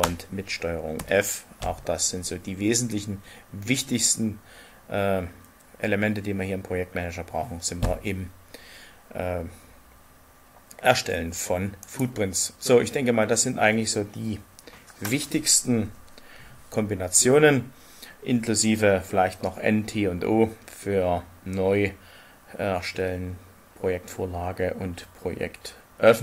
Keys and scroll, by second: 0.9 ctrl+f.